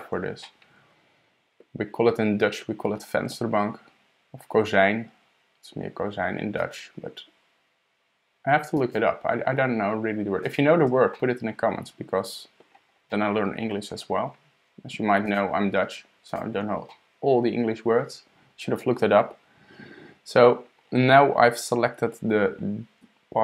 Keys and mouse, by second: 0.4-1.7 middle drag, 6.6 shift+click, 8.8 shift+click, 10.4 shift+click, 11.1-12.6 drag, 13.1 click, 13.1-13.7 middle drag, 15.3 shift+click, 16.3 shift+click, 16.9-18.0 middle drag, 17.4 click.